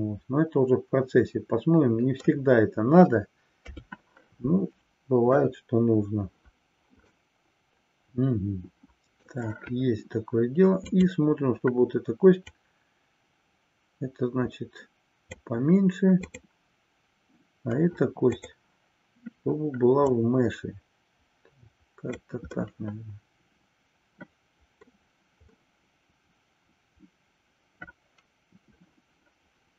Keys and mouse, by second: 3.6 KP_3, 7.2-9.3 middle drag, 10.9 click, 12.6-15.6 drag, 18.3-19.0 drag, 20.2-22.3 drag, 22.6-25.2 middle drag, 25.6-29.7 middle drag.